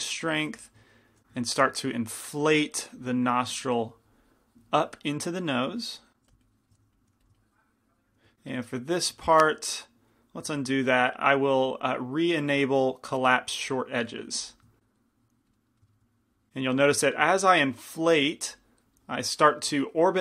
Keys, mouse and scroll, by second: 0.3 middle click, 0.7 f, 1.2 f, 1.6-3.6 drag, 6.2 middle click, 6.3 f, 6.5 click, 7.1 f, 7.4 click, 8.4 middle click, 10.3 ctrl+z, 14.4-15.6 drag, 14.4 f, 15.6 middle click, 17.0 click, 18.7-20.2 drag.